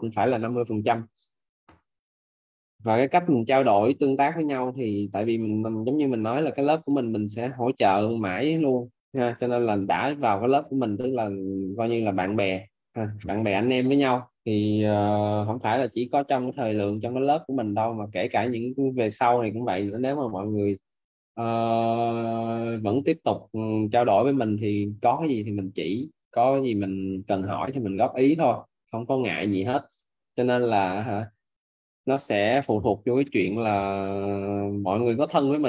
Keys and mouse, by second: 0.3 click.